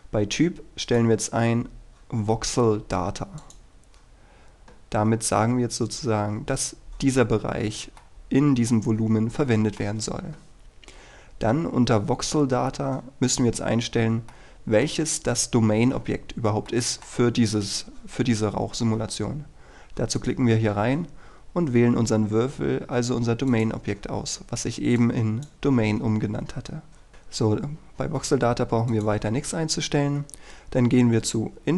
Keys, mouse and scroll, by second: 0.9-4.6 drag, 8.1-10.6 middle drag, 10.7-14.4 scroll down 1, 14.4-15.6 middle drag, 20.3-24.6 drag, 27.1-29.0 scroll down 1, 29.0 click.